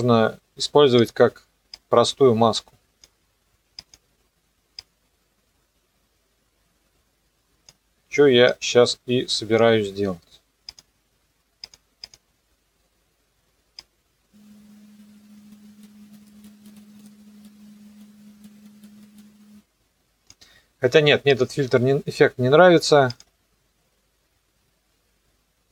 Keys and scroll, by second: 16.2 ctrl+z.